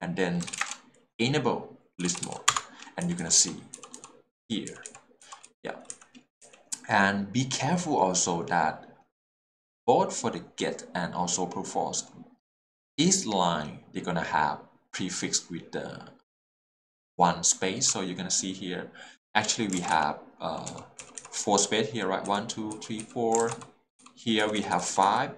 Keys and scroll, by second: 0.4 s, 0.5 e, 0.5 t, 0.6 space, 2.0-3.0 typing, 2.5 Return, 4.7 k, 5.2 j, 5.9 k, 19.8 alt+a, 19.9 h, 20.7 0, 21.0 k, 22.3 l, 23.4 alt+a, 23.6 l, 24.4 h, 24.6 l.